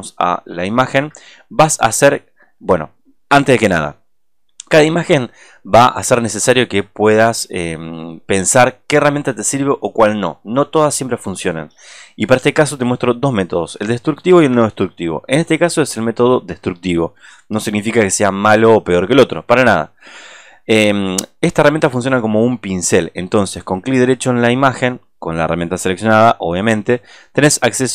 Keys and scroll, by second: 0.0 alt+space.